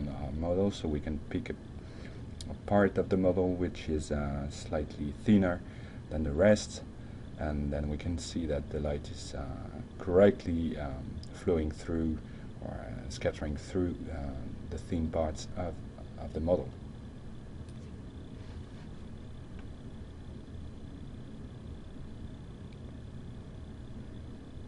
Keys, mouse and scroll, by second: 0.6 middle drag, 1.4 r, 2.6-3.0 drag, 11.8-12.8 middle drag, 13.2 F5, 22.2 click, 23.8 F10, 23.9 Tab.